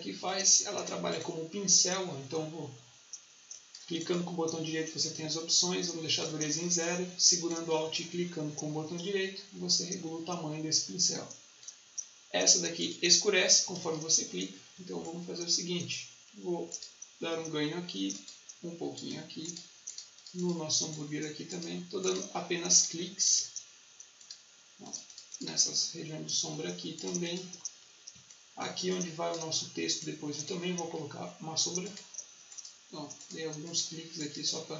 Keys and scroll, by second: 13.7 ctrl+z, 28.7 space.